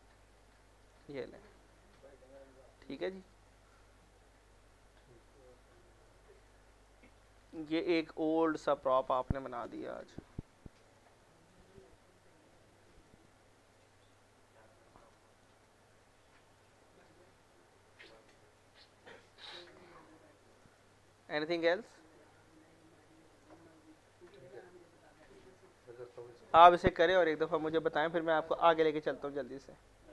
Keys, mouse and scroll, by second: 1.2-2.0 scroll down 1, 3.5-5.8 middle drag, 5.8 scroll up 1, 6.1 alt+middle click, 6.5-6.9 scroll up 2, 6.9 alt+middle click, 7.9 click, 8.2 alt+middle click, 10.0 p, 10.5 middle click, 11.4 click, 12.7 F4, 13.1 middle click, 13.3 scroll down 1, 13.7 alt+middle click, 14.0 click, 14.4-14.9 scroll up 1, 14.9 click, 15.7-19.3 alt+middle drag, 19.3 alt+middle click, 20.0 click, 21.3 scroll, 21.5 scroll down 1, 21.7 middle click, 22.8 scroll, 23.3 click, 24.2 z, 24.5 alt+middle click.